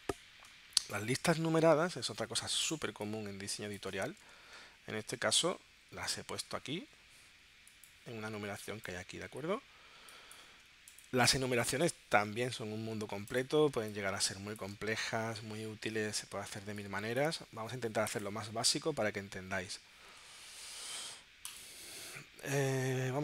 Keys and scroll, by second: 2.9 space, 4.4 super+Tab, 11.4 super+Tab, 13.7 space, 16.6 space.